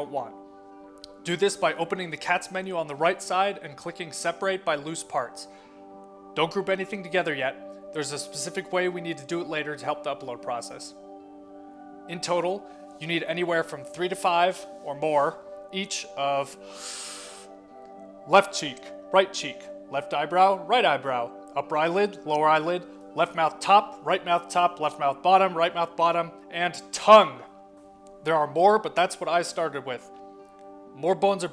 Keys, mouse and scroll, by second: 2.4 click, 5.7 click, 14.2 click, 15.1-17.4 middle drag, 18.7 middle click, 19.7 middle click, 20.1 middle click, 21.8 shift+click, 22.0 shift+click, 22.3 shift+click, 24.3 shift+click, 24.6 shift+click, 24.8 shift+click, 26.4 shift+click, 29.4 click.